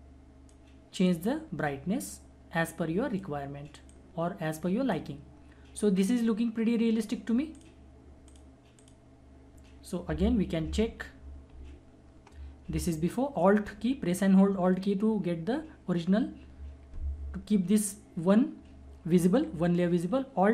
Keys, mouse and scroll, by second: 10.8 ctrl+-.